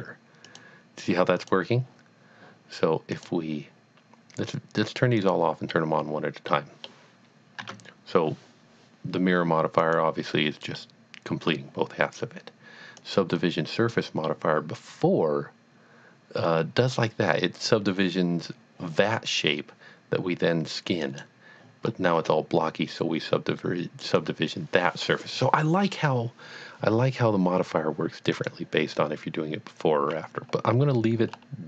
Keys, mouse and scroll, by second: 0.5 click, 1.4 click, 3.2 click, 5.2 click, 6.5 middle click, 7.6 Tab, 9.8 click, 10.5 scroll down 1, 10.8 middle click, 13.0 click, 14.3 middle click, 21.0 click, 21.9-22.3 scroll up 1, 24.0 click, 28.3 click, 28.5 click, 30.8-31.1 scroll down 1, 31.5 scroll up 1.